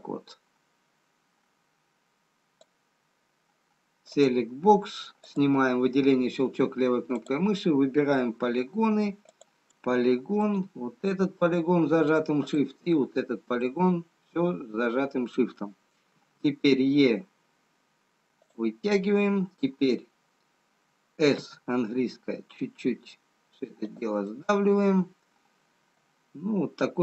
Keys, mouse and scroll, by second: 4.7 click, 5.2 click, 7.7 click, 12.3 shift+click, 13.4 shift+click, 13.4-14.4 scroll down 2, 14.6 middle click, 17.7 e, 21.3 s, 24.7 middle click.